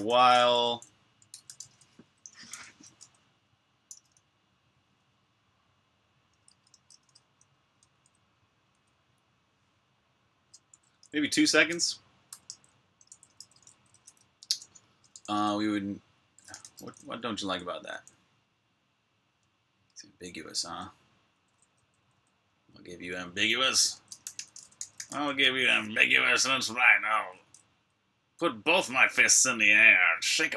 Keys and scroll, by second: 0.0-2.3 typing, 3.7 [, 6.3 Return, 6.5-8.5 typing, 10.6 2, 11.7-18.3 typing, 20.2-21.9 typing, 23.1-25.7 typing, 28.2 typing.